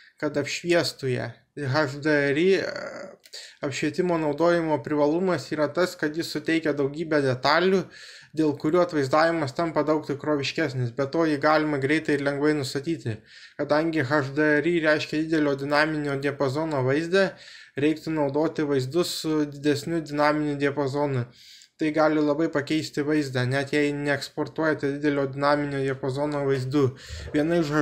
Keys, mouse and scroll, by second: 19.6-27.8 middle drag.